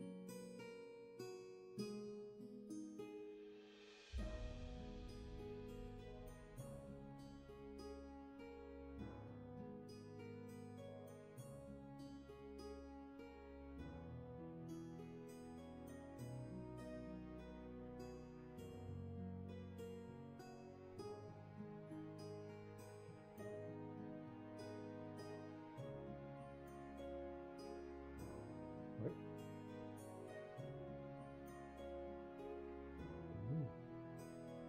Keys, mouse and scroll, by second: 3.6 ctrl+z, 5.7 ctrl+z, 22.4 ctrl+z, 27.2 ctrl+z, 29.4 ctrl+z, 34.2 ctrl+z.